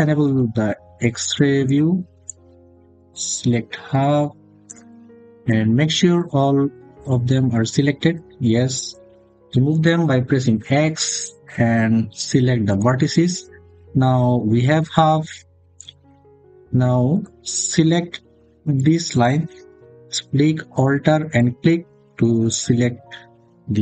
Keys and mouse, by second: 0.0 click, 1.5 click, 2.1 click, 5.3 click, 10.3 x, 13.4 click, 16.9 click, 18.6 click, 21.2 alt+click.